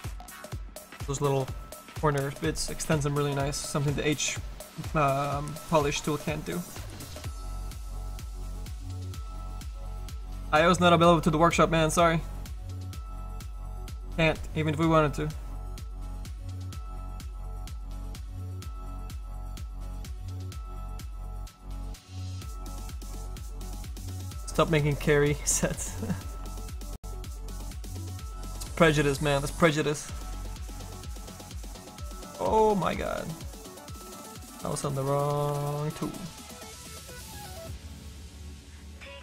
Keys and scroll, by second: 35.5 s.